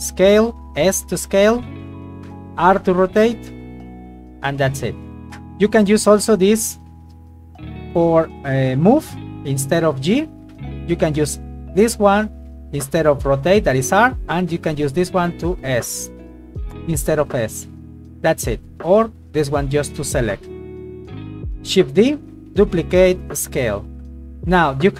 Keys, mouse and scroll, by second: 0.1 s, 0.7 click, 1.1 f, 1.1 g, 1.5 click, 2.0 right click, 2.7 r, 5.3 click, 6.4 click, 10.9 click, 14.2 click, 18.6 click, 20.1 right click, 20.5 right click, 21.2 right click, 22.1 shift+d, 22.6 click, 23.0 s, 24.1 g, 24.6 click.